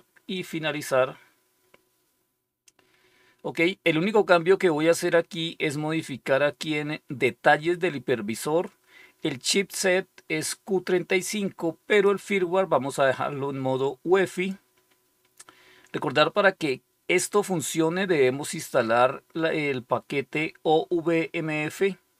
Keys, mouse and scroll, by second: 0.2 click, 11.8 click, 14.2 click.